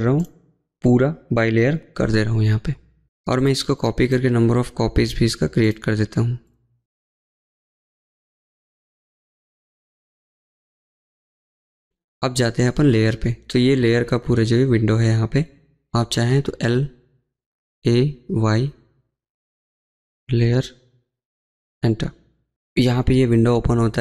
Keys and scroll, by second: 5.2 Escape.